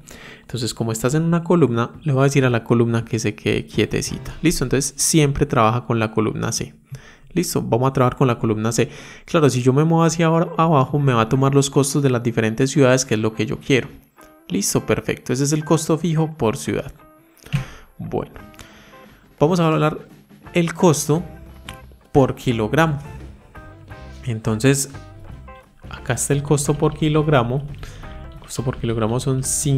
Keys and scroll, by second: 2.1 F4.